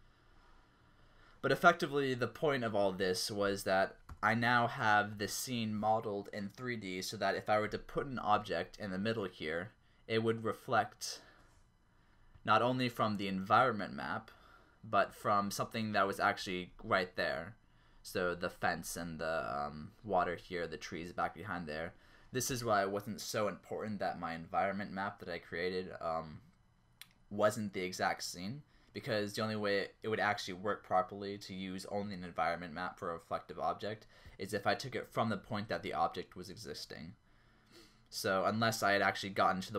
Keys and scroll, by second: 4.1 0.